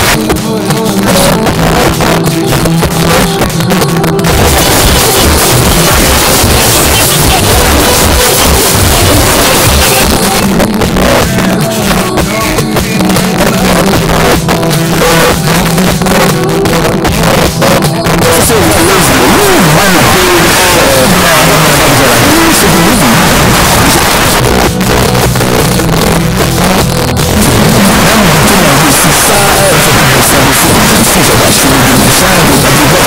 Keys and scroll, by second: 2.3 Page_Down, 10.0 Page_Down, 24.0 Page_Down, 33.0 space.